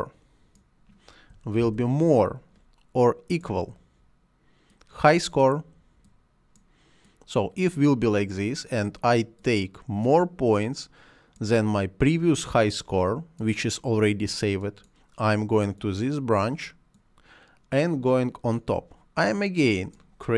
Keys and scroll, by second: 1.5 shift+..